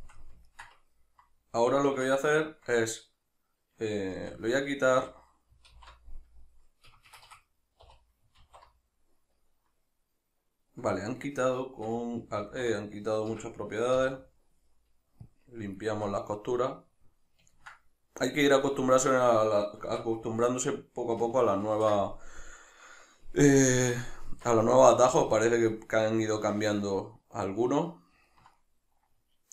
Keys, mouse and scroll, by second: 1.9 Tab, 6.9 Escape, 7.9 2, 8.4 alt+e, 11.8 Escape, 12.4 alt+e, 13.4 Escape, 15.8 shift+middle click, 17.5-23.5 ctrl+middle drag, 19.9 Tab, 21.7 ctrl+2, 23.5 click, 24.3 Tab, 24.8-29.5 shift+middle drag.